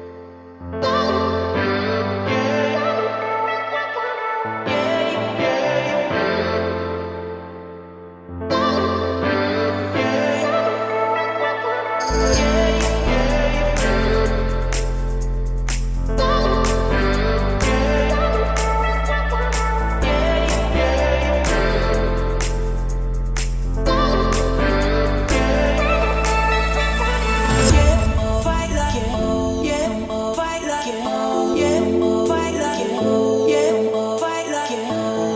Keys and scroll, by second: 22.7 1, 28.1 Escape, 29.4 Escape, 31.9 Escape, 34.3 4.